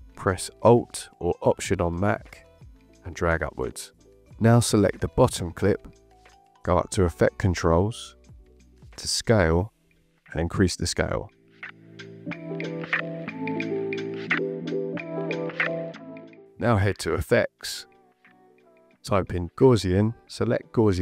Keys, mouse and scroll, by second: 0.2 alt+click, 4.6 click, 7.0 click, 12.6 click, 18.3 click, 19.6-20.4 typing.